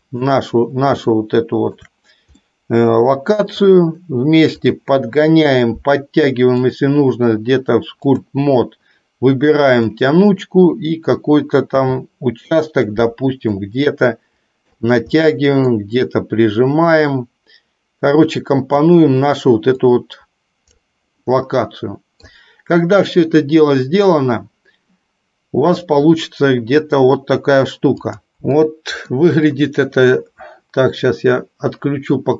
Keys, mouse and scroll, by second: 1.4 shift+middle click, 2.5-3.8 middle drag, 6.7-8.5 drag, 9.9 click, 13.7-15.0 drag, 15.4 middle click, 17.0-19.0 drag, 20.0-21.1 drag, 21.4-22.4 middle drag, 28.1 click, 28.9 middle click.